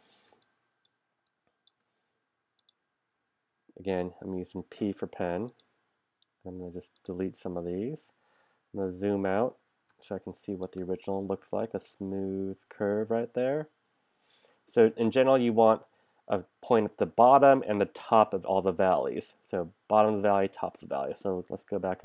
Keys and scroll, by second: 0.3 space, 4.0 p, 8.8 super+-, 9.9 space, 21.8 super+=.